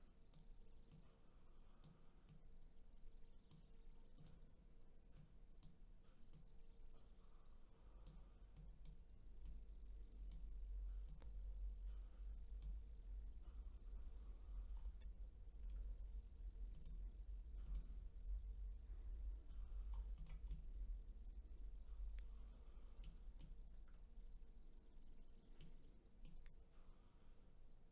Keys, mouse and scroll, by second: 0.9-2.4 drag, 4.1 click, 5.1 click, 6.3 click, 8.5-9.5 drag, 11.0 click, 14.7-15.6 scroll down 3, 15.6 scroll up 4, 16.7 click, 17.6 click, 19.9 scroll down 1, 20.1 click, 20.5-25.8 middle drag, 25.8-26.2 scroll up 2, 26.2-27.9 middle drag.